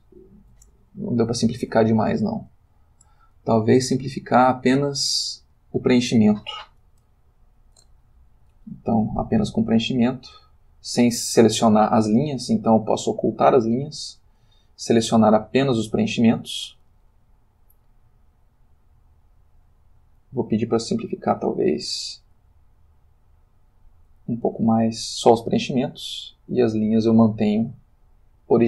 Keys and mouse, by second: 0.8 ctrl+middle click, 1.6 ctrl+shift+middle click, 2.0 ctrl+shift+middle click, 4.2 click, 5.6 click, 7.0 l, 9.9 click, 11.3 Escape, 13.6 click, 14.6 ctrl+middle click, 16.0 a, 18.4 click, 18.8 middle click, 19.5 click, 21.0 click, 21.6 click, 23.4 click, 26.2 click.